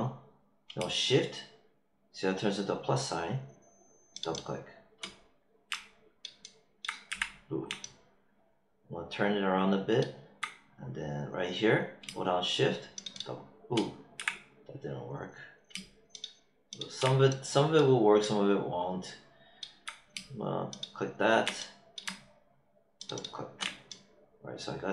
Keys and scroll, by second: 7.0 z, 14.1 z.